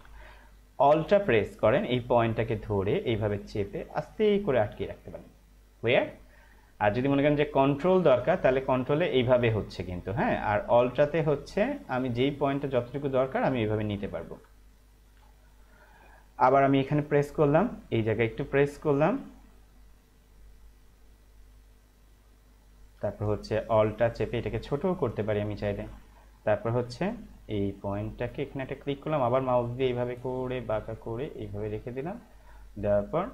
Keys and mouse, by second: 2.1 alt+click, 8.6 ctrl+click, 11.9 alt+click, 28.5 click.